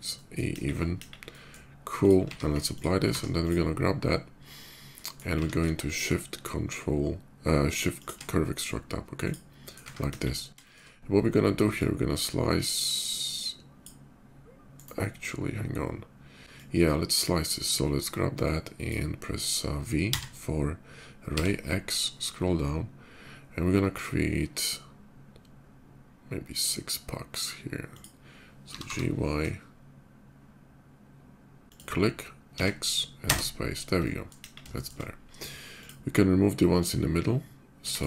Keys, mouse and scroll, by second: 0.3 KP_5, 0.5 middle click, 1.1 middle click, 1.1 KP_5, 1.6 click, 2.0 q, 2.5 ctrl+click, 2.8 ctrl+q, 3.2 Tab, 3.2 click, 4.6 middle click, 4.8 right click, 5.0 q, 5.6 shift+q, 7.7 shift+click, 9.0 shift+click, 9.3-9.7 shift+middle drag, 10.3 shift+KP_5, 10.4 middle drag, 10.6-11.0 middle drag, 11.5-13.6 drag, 14.5 right click, 16.3-16.8 drag, 17.2-18.6 drag, 19.9 v, 21.1 x, 21.9 middle click, 23.2 middle click, 27.7 click, 28.5 g, 29.2 shift+y, 32.3 x, 33.0 space, 33.5 middle click, 33.8-34.1 middle drag, 34.5 middle drag, 34.5 shift+KP_5, 35.4 click, 36.5 shift+click, 37.6 x, 37.7 click.